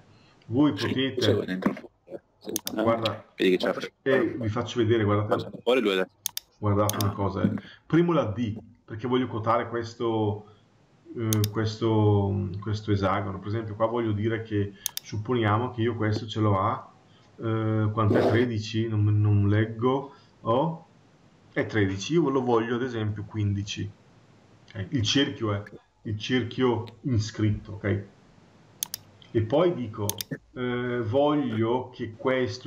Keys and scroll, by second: 23.5 Return.